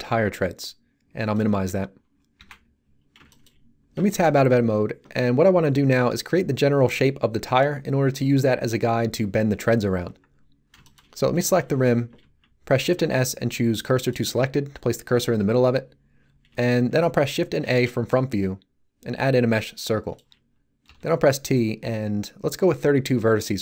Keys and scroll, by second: 2.3 n, 4.3 Tab, 12.8 shift+s, 17.6 shift+a, 20.8 t.